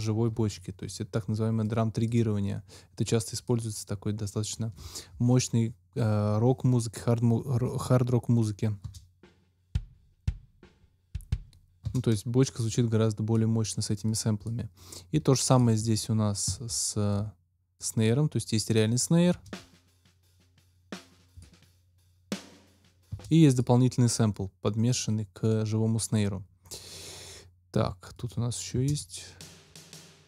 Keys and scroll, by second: 8.8 space, 11.8 space, 19.2 space, 23.0 space, 28.7 space.